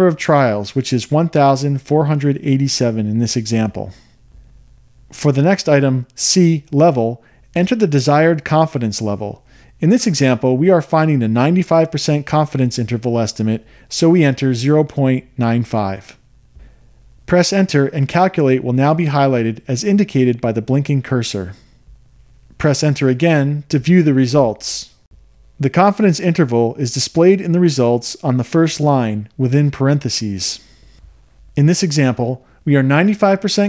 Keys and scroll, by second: 1.9 1, 2.9 4, 3.3 8, 3.9 7, 5.9 Return, 14.4 0, 15.0 ., 15.9 9, 16.4 5, 18.2 Return, 23.4 Return.